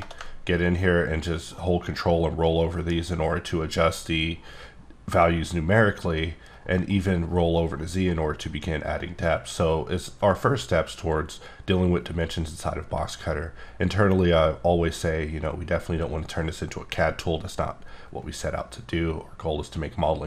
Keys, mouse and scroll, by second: 0.0 shift+d, 0.3-0.7 ctrl+scroll up 5, 0.8 ctrl+scroll down 4, 1.3-2.0 ctrl+scroll up 10, 2.0-3.0 ctrl+scroll down 15, 3.9 ctrl+scroll up 11, 4.8 ctrl+scroll up 2, 5.3 ctrl+scroll down 9, 5.4 ctrl+scroll up 16, 6.6 ctrl+scroll up 1, 6.9 ctrl+scroll down 10, 8.6 scroll down 2, 8.8 ctrl+scroll up 6, 9.1-9.7 ctrl+scroll down 9, 10.0-11.0 scroll down 1.